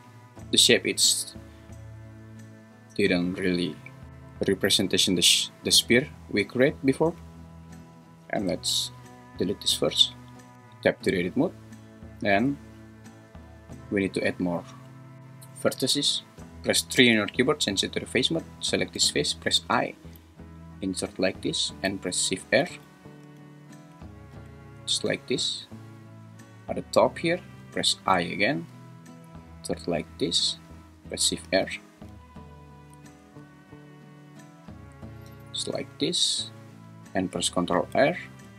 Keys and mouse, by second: 3.2 `, 10.5 Tab, 14.3 3, 16.9 3, 19.7 i, 22.8 shift+r, 23.3 shift+r, 23.9 shift+r, 24.4 shift+r, 28.2 i, 30.4 click, 31.5 shift+r, 32.2 shift+r, 33.0 shift+r, 35.4 shift+r, 36.3 `, 37.8 ctrl+r.